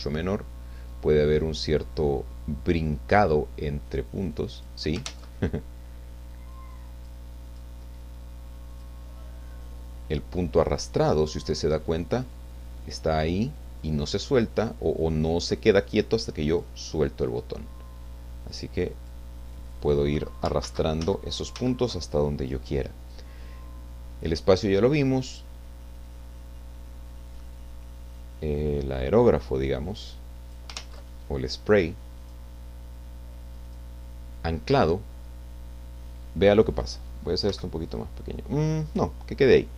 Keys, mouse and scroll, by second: 1.6-3.3 drag, 3.9 click, 5.3 ctrl+z, 6.5 click, 7.5 click, 8.7 click, 9.6-17.5 drag, 18.4 click, 19.5 click, 20.9 ctrl+z, 23.0 click, 25.2 click, 25.9-30.8 drag, 30.8 ctrl+z, 32.2 click, 33.7 click, 37.5 f, 38.9 click.